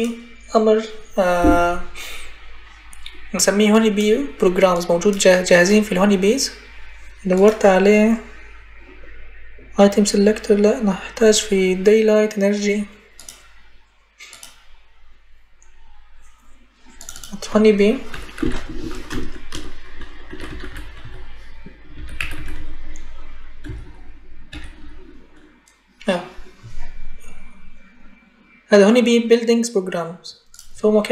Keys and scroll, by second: 17.9-24.6 typing.